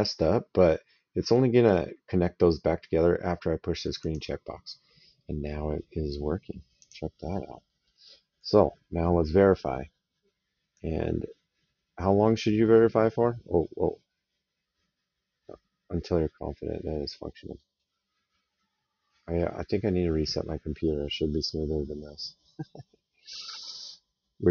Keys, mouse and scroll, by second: 3.8 click, 6.6 click, 7.4 middle click, 7.8 right click, 10.5 click.